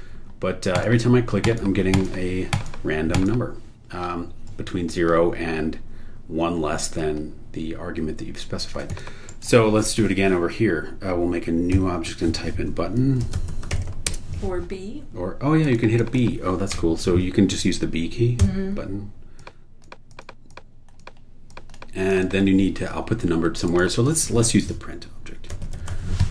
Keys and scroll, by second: 9.3 super+e, 13.0-14.3 typing, 16.7 BackSpace, 18.4 b, 24.4-26.3 typing.